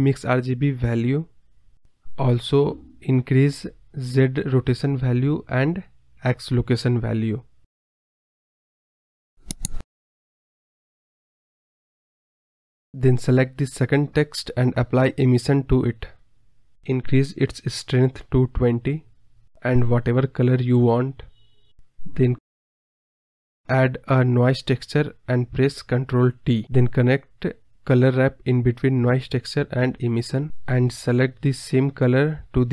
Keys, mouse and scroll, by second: 4.3 scroll down 4, 5.4-8.3 drag, 8.3-8.6 scroll up 5, 8.6-9.1 scroll down 3, 9.1-9.7 drag, 10.0 click, 10.4 scroll down 1, 10.5 scroll up 1, 10.6 scroll down 3, 10.8-11.2 scroll up 8, 11.2 scroll down 1, 11.3 middle drag, 11.5-11.9 scroll up 3, 11.9 click, 12.0-12.6 scroll down 6, 12.1 middle click, 12.2 KP_0, 12.6-13.9 drag, 14.9 click, 15.1 x, 17.5-18.6 drag, 18.6 scroll up 4, 18.8 scroll down 3, 18.9 scroll up 2, 19.0 scroll down 1, 19.0 scroll up 2, 19.1 scroll down 3, 19.3 scroll up 1, 19.5-21.0 scroll down 3, 21.6 click, 21.8-23.4 scroll up 4, 24.1 scroll up 2, 26.5-27.0 drag, 27.5 ctrl+t, 29.3 shift+a, 30.4 drag.